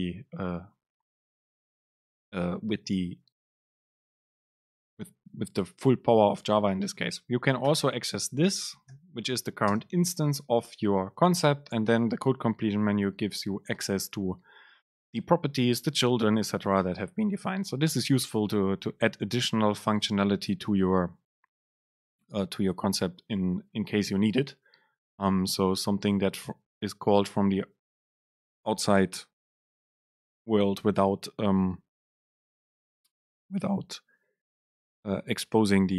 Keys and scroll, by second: 2.0 Right, 2.8 BackSpace, 7.7 Return, 9.9 super+space.